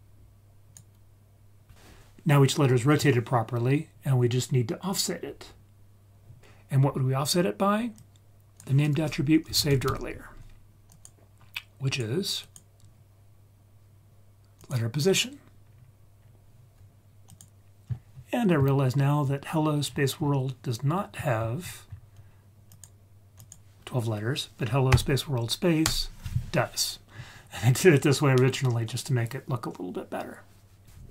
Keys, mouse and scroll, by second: 6.4 ctrl+z, 6.4 Escape, 8.0-11.1 drag, 12.4-14.7 drag, 15.6-16.2 scroll down 1, 16.2-16.8 scroll down 3, 19.8-20.9 scroll down 5, 20.9-22.7 scroll up 9, 22.7 click.